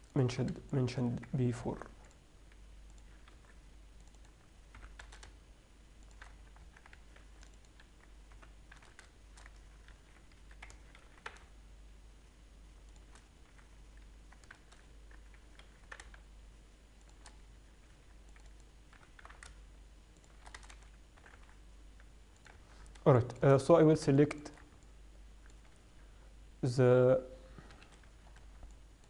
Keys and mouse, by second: 2.0 ctrl+r, 3.7 ctrl+r, 5.0 g, 6.6 Tab, 6.9 Tab, 8.0 ctrl+r, 8.6 g, 11.3 ctrl+b, 13.8 f, 14.8 ctrl+z, 15.9 ctrl+b, 18.2 ctrl+r, 19.2 g, 20.8 a, 21.0 a, 21.4 s, 22.8 Tab, 28.0 KP_3, 28.4 z.